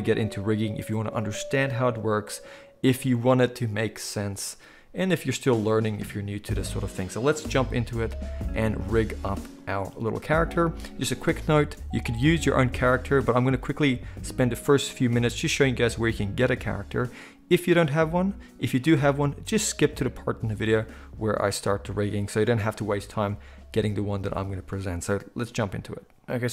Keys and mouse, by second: 9.8-26.5 shift+middle drag, 26.1 click.